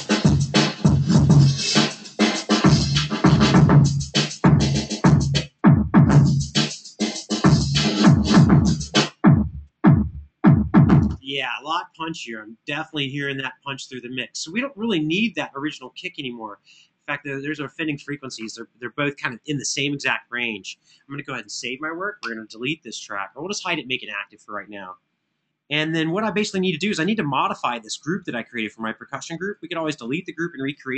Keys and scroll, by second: 2.8 super+=, 10.8 space, 21.3 super+s.